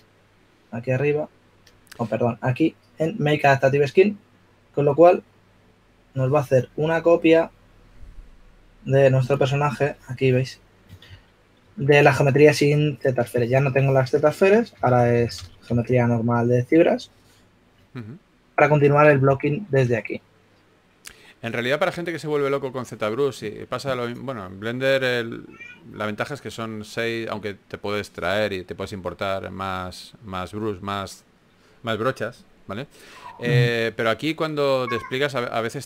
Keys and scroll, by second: 11.8-12.4 typing, 15.7-17.1 typing, 20.3 shift+f, 34.7-35.7 typing.